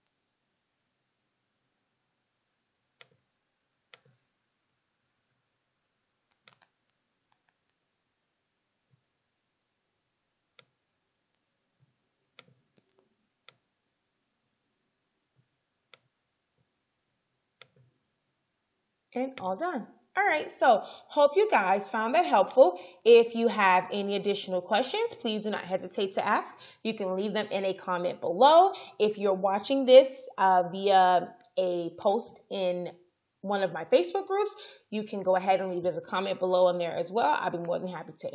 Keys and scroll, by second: 5.1 ctrl+c, 5.4 ctrl+f.